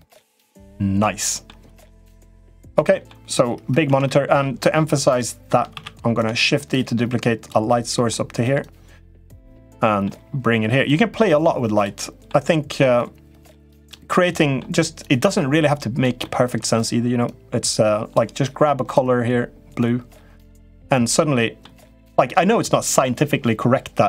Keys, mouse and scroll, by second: 1.5 click, 2.1 middle click, 2.7 middle click, 3.6 Tab, 3.8 middle click, 4.8 click, 5.6 shift+d, 6.4 click, 7.6 middle click, 8.5 click, 9.4 middle click, 10.7 click, 11.9 middle click, 12.8 click, 14.1 middle click, 14.8 click, 16.1 middle click, 17.1 click, 20.8 middle click.